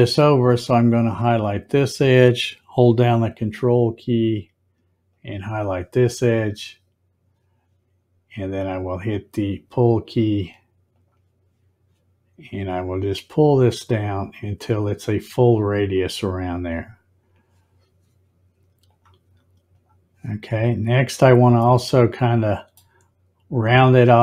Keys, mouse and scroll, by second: 1.4 click, 5.0 ctrl+click, 10.9 click, 12.8-16.4 drag, 18.8 click, 19.7 click, 21.6-23.5 middle drag.